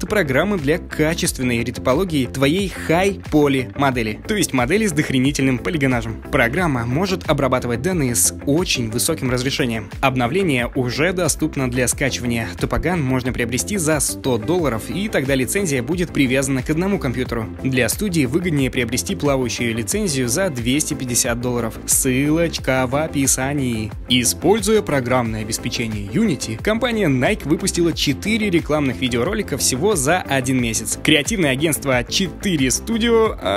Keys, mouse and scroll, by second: 1.1 space, 2.2 alt+click, 3.2 space, 3.8 click, 4.2 alt+click, 5.1 right click, 5.9 space, 6.6 click, 7.2 alt+click, 7.5 space, 7.8 right click, 8.1 alt+click, 11.8 alt+click, 11.8 alt+right click, 12.4 alt+click.